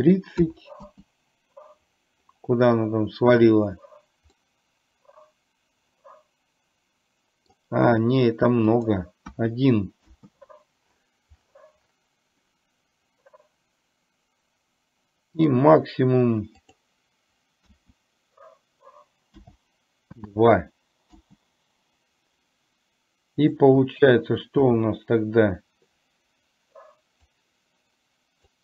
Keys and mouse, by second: 4.4-7.6 middle drag, 8.8-10.1 drag, 16.6-21.3 drag, 23.4 click, 27.4-28.6 drag.